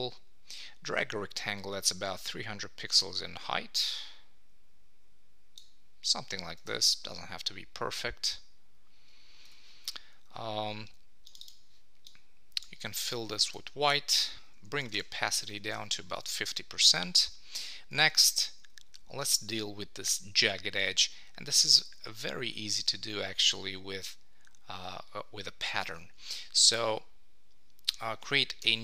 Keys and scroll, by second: 6.7 Return, 13.5 Return, 15.7 super+s, 18.0 super+Tab, 20.9 super+Tab, 25.9 super+Tab, 28.6 super+n.